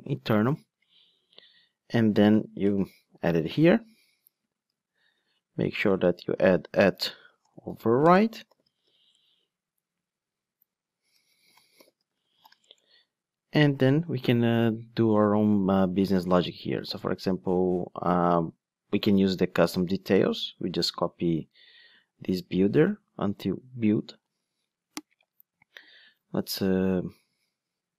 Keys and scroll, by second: 3.3 super+v, 4.7 Tab, 5.2 super+z, 6.1 Tab, 8.8 Tab, 9.1 Return, 12.6 Return, 24.2 super+c.